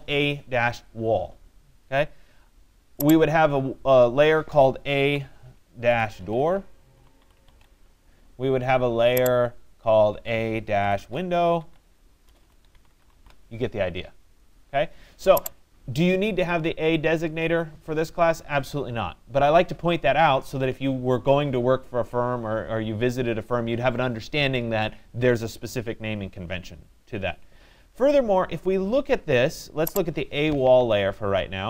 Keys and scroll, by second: 11.8 BackSpace.